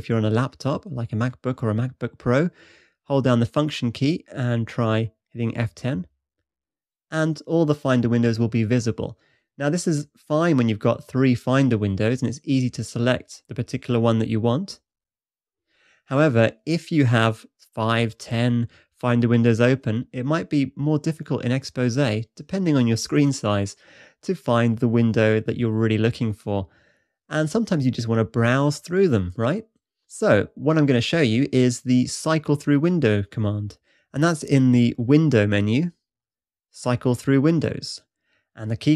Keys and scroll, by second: 6.2 F10.